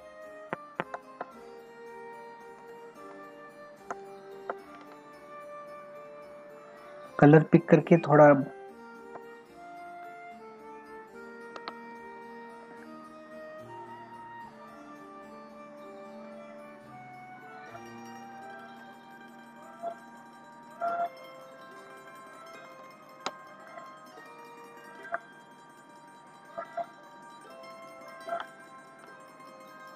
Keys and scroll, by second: 2.6 space, 4.8 ctrl+alt+z, 11.6 ctrl+alt+z, 22.8 space.